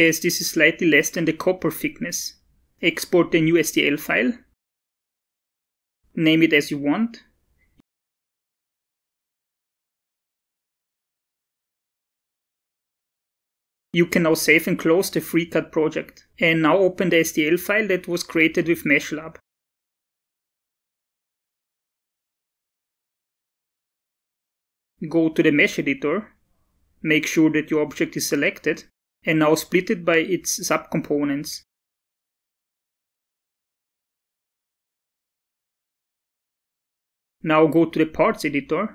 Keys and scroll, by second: 10.5-11.7 typing, 33.7 space.